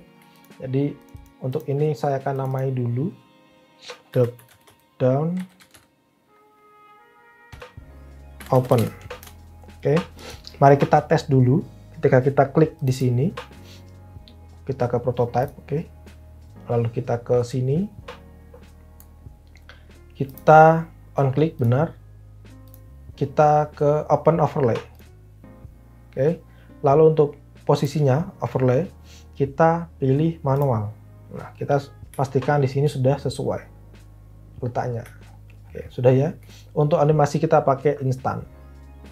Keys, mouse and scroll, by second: 3.9-6.1 typing, 7.2-9.1 typing, 9.1 Return.